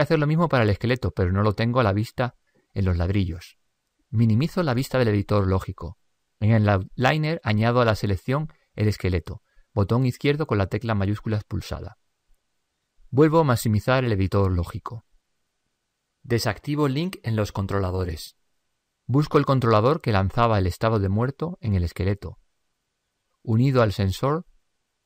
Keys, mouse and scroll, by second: 6.0 ctrl+Up, 10.7-12.4 drag.